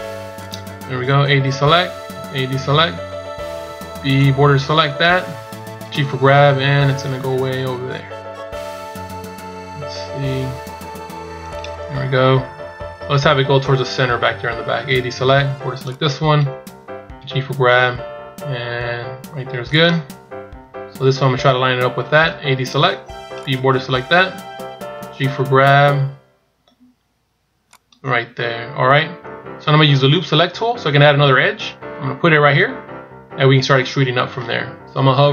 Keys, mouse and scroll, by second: 0.9-2.1 scroll down 1, 2.1 a, 3.5 b, 5.9 g, 11.8-13.3 scroll down 1, 13.3-13.8 scroll down 3, 13.8-14.6 scroll up 2, 14.8 a, 15.3 b, 17.1 g, 20.1-20.6 scroll up 4, 22.3 a, 23.1 b, 25.0 g, 28.2-28.8 scroll down 2.